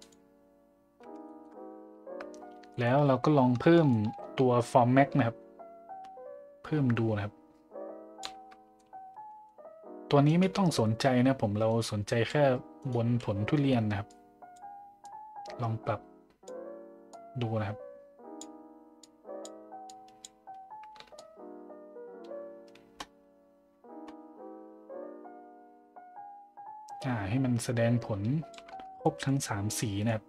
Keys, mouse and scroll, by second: 1.2 shift+middle drag, 2.7 middle click, 3.9-8.2 shift+drag, 8.8-9.4 middle drag, 14.1-14.5 drag, 15.0-16.5 drag, 17.1-18.4 drag, 19.0-19.4 drag, 19.9-20.2 drag, 21.2-28.5 shift+drag, 29.0 middle drag, 29.8 middle drag.